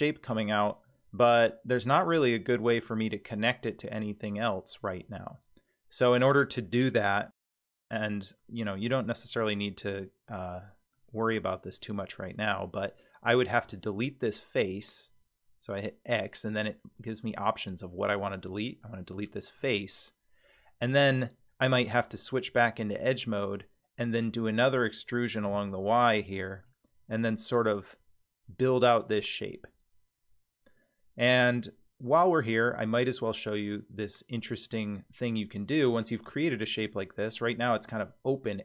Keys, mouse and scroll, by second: 9.3 3, 10.4 click, 10.9-12.5 middle drag, 13.5 x, 19.6-21.2 middle drag, 22.5 2, 23.1 click, 23.5 middle click, 24.5 e, 26.6-36.4 middle drag, 36.7-37.3 scroll up 4, 37.3-37.7 scroll down 3, 37.8-38.6 middle drag.